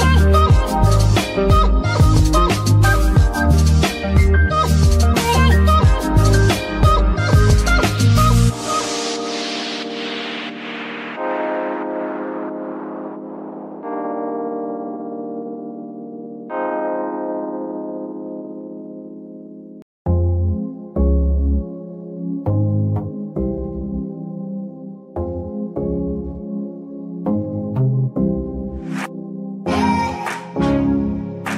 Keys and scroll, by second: 0.3 KP_3, 0.9 Tab, 1.4 s, 2.9 Tab, 19.0 KP_3.